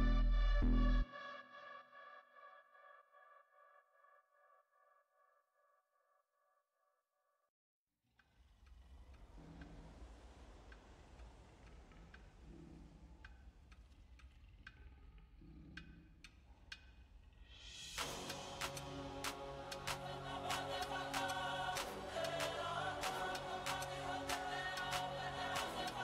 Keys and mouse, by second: 0.3-2.5 drag, 0.3-2.5 right drag, 3.5-4.8 right drag, 4.6 middle click, 4.8 click, 6.0-7.9 drag, 10.1 Tab, 12.7 Tab, 14.4 click, 15.3-16.4 middle drag, 16.4 z, 20.1 e, 21.0 z, 21.3 click, 22.1 Tab, 24.3 KP_1, 25.1 z, 25.9 z.